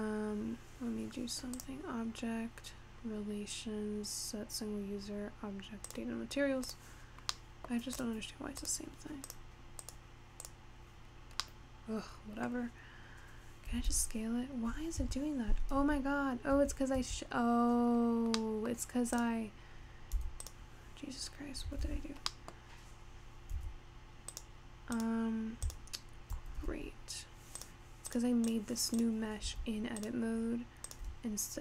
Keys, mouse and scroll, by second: 1.6-4.7 drag, 6.7 drag, 7.5-8.0 middle drag, 8.0 click, 8.6 click, 9.5 click, 9.8 click, 10.4 click, 11.5-13.7 middle drag, 13.7 s, 15.9 Tab, 16.6 Tab, 17.1 Tab, 18.0-18.4 scroll up 3, 18.4 middle click, 19.3 click, 20.2 x, 21.8 ctrl+z, 22.3 scroll down 1, 22.4 middle click, 22.8-23.6 scroll up 1, 23.6 a, 24.4 click, 25.0 click, 25.7 shift+click, 26.6 x, 28.2 click, 28.5 click, 29.0 click, 29.5 x, 30.9 click, 31.2 x.